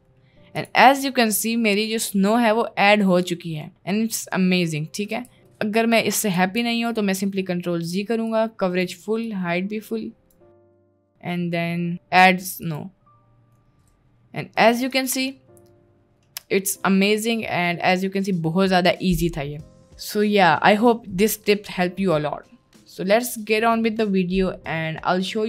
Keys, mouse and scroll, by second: 0.2 middle drag, 1.0-2.4 middle drag, 2.6-3.0 middle drag, 3.3-3.7 middle drag, 4.2 middle click, 5.4 ctrl+z, 5.5 middle click, 6.0 middle click, 6.4 ctrl+z, 8.3 click, 9.4-10.4 drag, 10.7-11.9 middle drag, 12.6 middle click, 13.8-14.8 middle drag, 15.0 middle click, 15.5-16.4 middle drag, 16.7-17.1 middle drag, 17.4 middle click, 19.4 middle click.